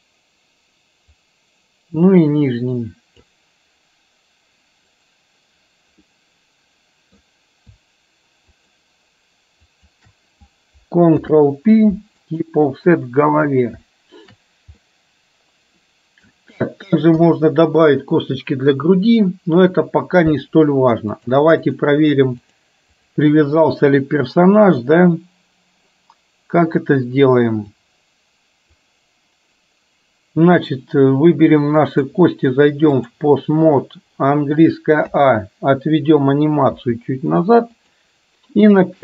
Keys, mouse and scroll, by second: 6.2-7.3 middle drag, 9.8 shift+click, 11.3 ctrl+p, 14.0 shift+middle click, 14.9-16.3 middle drag, 17.3 KP_1, 21.3-21.8 drag, 22.7-23.4 drag, 27.9 click, 32.0-33.4 drag.